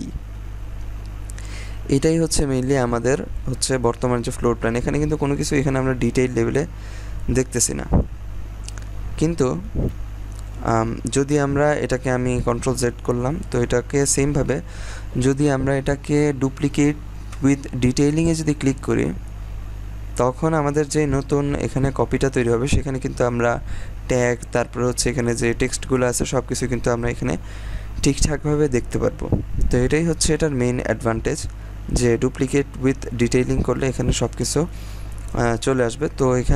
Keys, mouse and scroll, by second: 3.4 scroll down 1, 4.4-5.4 scroll up 1, 5.4-6.0 scroll down 1, 6.0-7.4 scroll up 1, 9.2-11.2 scroll down 1, 12.3 scroll down 1, 12.5 ctrl+z, 13.9 right click, 18.2 click, 19.6-21.5 scroll down 1, 22.7 scroll up 1, 26.1-28.1 scroll down 1.